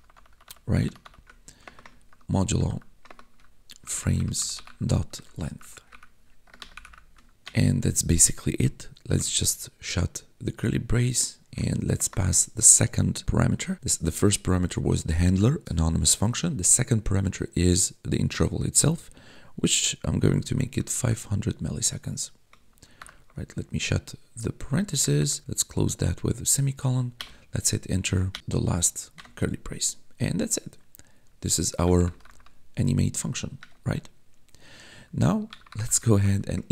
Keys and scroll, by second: 1.5-7.3 typing, 7.3 Return, 9.0 shift+], 11.4 ,, 11.8 space, 20.2 5, 22.9 shift+0, 24.3 ', 24.9 BackSpace, 25.4 ;, 27.1 Return, 29.1 Return, 31.5-32.7 typing, 33.1 Tab, 33.5 Return, 35.2-36.7 typing.